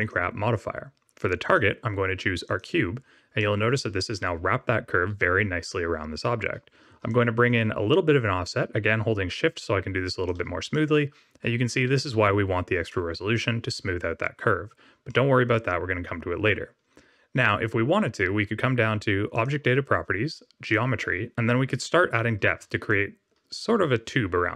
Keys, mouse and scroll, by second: 1.4 click, 3.3 middle click, 7.0 shift+click, 10.7 middle click, 11.8-12.8 scroll up 2, 12.8 middle click, 15.0 middle click, 19.3 click, 20.6 click, 22.8 shift+click.